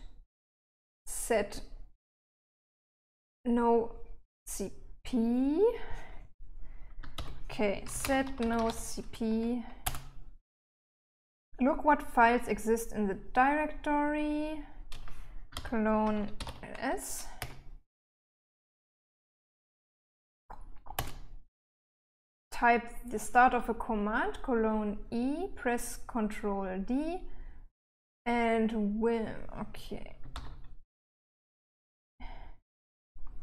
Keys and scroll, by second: 7.4-9.5 typing, 10.1 Return, 15.8-17.2 typing, 17.7 Return, 21.3 Return, 30.6 typing, 32.0 typing.